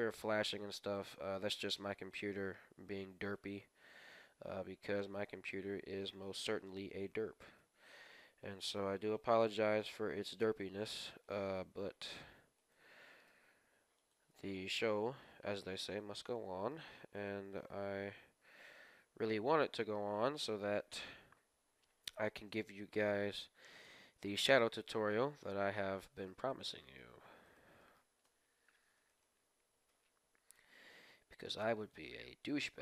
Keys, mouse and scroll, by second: 0.9-3.7 right drag, 2.6 g, 5.6-8.3 middle drag, 7.4-9.6 right drag, 8.6 g, 11.1-14.3 right drag, 13.2 g, 14.3 g, 16.3-19.6 middle drag, 18.9 ctrl+z, 19.2 ctrl+z, 19.9-20.4 scroll down 1, 20.1 Tab, 20.4-22.1 middle drag, 22.6 KP_1, 23.0-26.2 middle drag, 23.1-23.6 scroll up 2, 23.8 Tab, 26.2-30.6 right drag, 26.7-29.4 middle drag, 28.1 KP_1, 29.8 g, 32.6 g.